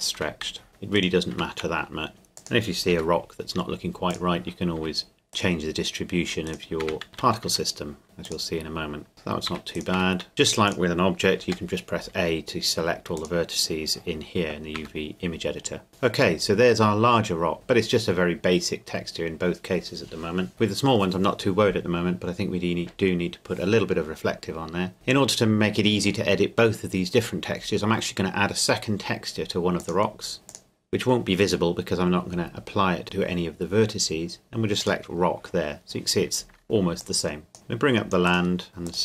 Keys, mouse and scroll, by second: 0.2 Tab, 0.9 right click, 1.3 Tab, 2.1 s, 2.4 click, 2.9 g, 4.1 click, 4.8 Tab, 5.3 right click, 6.8 Tab, 7.1 a, 7.5 a, 8.0 g, 8.3 click, 9.5 Tab, 9.7 right click, 9.9 Tab, 10.3 x, 10.7 click, 11.5 g, 13.2 click, 14.7 Tab, 15.9-16.4 scroll down 1, 16.4 middle click, 17.7-19.8 scroll down 1, 20.5 click, 29.8 click, 34.8 click, 37.5 shift+middle click, 38.3-39.0 shift+drag.